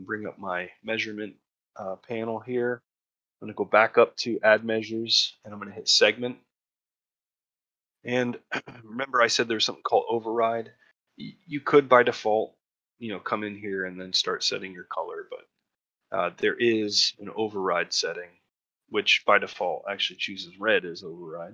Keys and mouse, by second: 7.1 middle click, 12.6 click, 19.1 click.